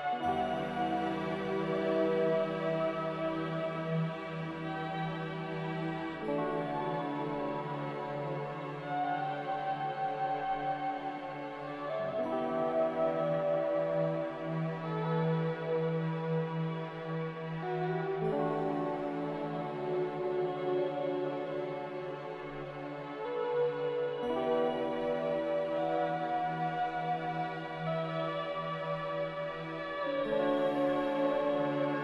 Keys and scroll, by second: 8.6 a, 14.6 z, 16.5 a, 19.8 a, 20.2 ctrl+c.